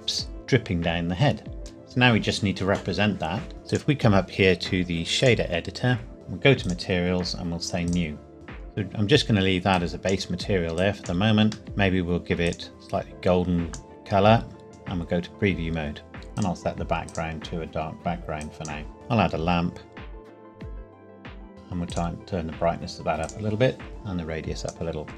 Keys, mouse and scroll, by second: 0.1 scroll down 1, 0.6 scroll down 1, 1.1-1.7 scroll down 1, 1.7 scroll down 1, 3.5 ctrl+s, 3.7 click, 6.6 click, 11.6 middle click, 12.5 click, 16.1 scroll up 1, 16.3 click, 18.9 shift+a, 20.3 KP_7, 20.4 g, 20.5 click, 20.6 KP_1, 20.7 r, 20.9 click.